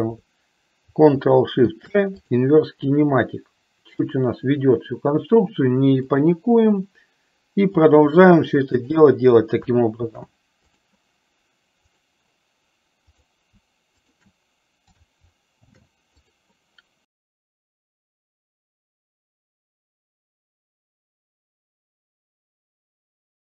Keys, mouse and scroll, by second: 1.7 ctrl+shift+c, 4.1 click, 6.2 click, 7.9 click, 8.9 shift+click, 10.2 ctrl+shift+c, 12.0 click, 15.8 ctrl+shift+c, 17.3 click, 17.7 click, 18.0 shift+click, 18.5 ctrl+shift+c, 20.0 shift+click, 21.7 click.